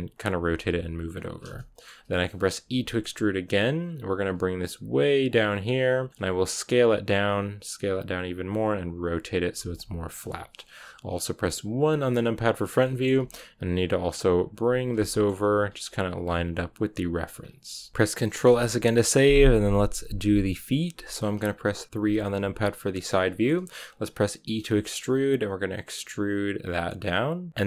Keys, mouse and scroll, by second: 0.1 r, 0.5 g, 1.2 scroll down 3, 1.4-2.5 shift+middle drag, 2.5 e, 6.0 shift+middle click, 6.2 s, 8.5 b, 9.1 r, 9.3 g, 9.7 r, 11.7 KP_1, 12.7 shift+middle click, 13.3-16.1 typing, 15.0 shift+middle click, 15.1 scroll up 1, 17.3-17.7 scroll down 3, 17.7 r, 17.9-21.9 shift+middle drag, 21.9 KP_3, 23.2 shift+middle click, 23.4 scroll up 1, 24.4 e.